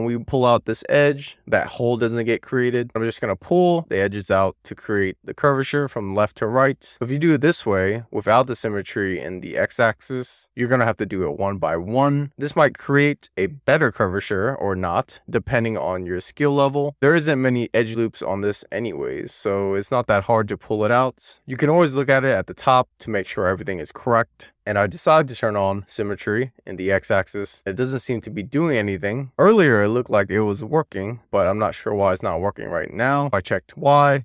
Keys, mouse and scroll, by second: 0.0 middle click, 1.2 click, 2.5 super+z, 2.8 middle click, 3.9 shift+middle click, 4.3 middle click, 5.1 click, 7.5 shift+middle click, 7.9 middle click, 9.0 middle click, 10.5 2, 10.7 click, 11.6 middle click, 12.5 click, 14.0-15.1 middle drag, 15.4 click, 16.0 alt+shift+click, 16.8 alt+shift+click, 17.1 middle click, 18.0 click, 19.9 middle click, 20.6 click, 21.6 middle click, 22.0 click, 22.2-22.6 scroll down 1, 22.6 middle click, 22.7 scroll down 1, 22.8 click, 23.4 middle click, 23.7 click, 24.0 scroll up 4, 24.3 scroll down 6, 24.8 click, 25.1 middle click, 26.2 click, 27.1 super+z, 28.1 click, 28.4-32.6 middle drag, 33.4 click.